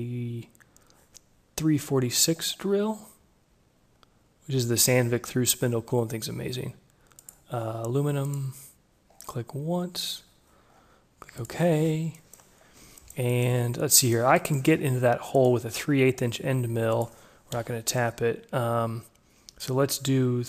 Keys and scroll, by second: 17.6 Delete.